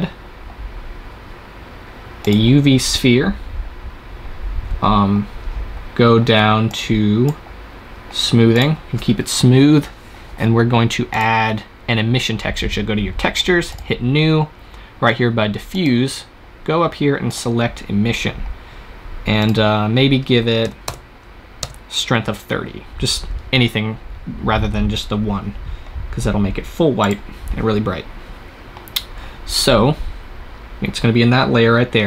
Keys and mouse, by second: 4.2-6.6 middle drag, 6.6-8.1 drag, 8.1-9.5 middle drag, 9.5 click, 11.0-12.9 drag, 13.6-15.4 drag, 15.7-21.2 drag, 26.9-28.8 drag.